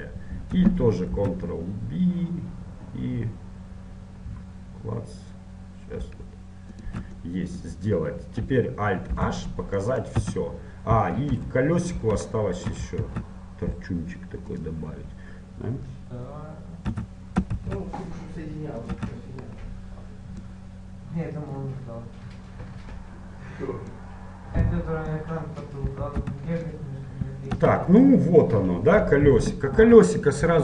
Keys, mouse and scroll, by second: 1.3 ctrl+b, 7.3-9.3 middle drag, 9.3 alt+h, 10.1 middle click, 10.3 a, 11.5 middle click, 11.5 KP_1, 14.7 shift+a, 17.1 s, 19.2 z, 19.7 middle click, 20.6-25.2 drag, 25.2 middle click, 26.4 z, 27.3-30.3 middle drag, 27.7 Tab, 30.3 t.